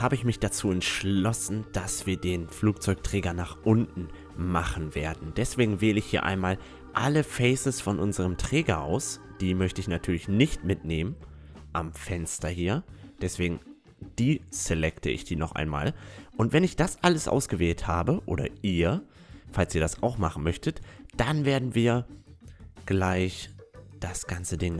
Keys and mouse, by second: 2.0-3.8 right drag, 2.6-7.6 middle drag, 7.6-10.4 right drag, 9.8 click, 9.8 middle click, 10.4-11.6 middle drag, 11.6-13.8 right drag, 13.8 middle click, 14.8 right click, 15.1 middle click, 15.9 middle click, 16.8-18.6 drag, 19.3-21.4 right drag, 19.9-21.6 middle drag, 21.4-24.4 drag, 21.6-22.9 right drag, 22.9-24.7 middle drag.